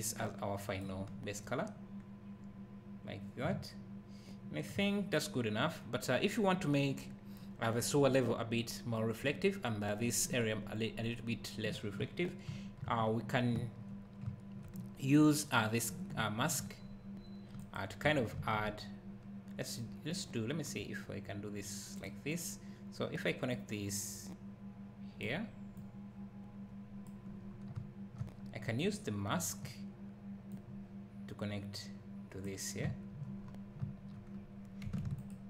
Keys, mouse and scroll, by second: 3.5 `, 4.6 `, 5.6 scroll up 1, 6.1-6.6 scroll down 1, 6.7-10.7 scroll up 1, 12.0 `, 12.9-13.6 scroll down 1, 13.6 `, 15.0-16.2 scroll down 1, 16.2 `, 16.9-17.3 scroll up 1, 17.6 click, 18.4 shift+a, 22.0 click, 25.8 click, 27.5 scroll down 1, 27.8 `, 28.4 scroll down 1, 30.5 click, 32.8 `, 33.4-33.8 scroll up 1, 34.3-34.9 scroll up 1, 35.2 ctrl+shift+click.